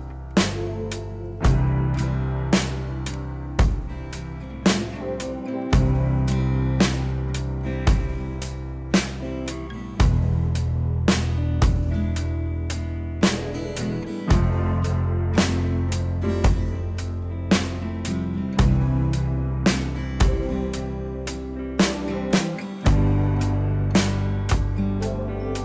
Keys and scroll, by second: 23.2 ctrl+z.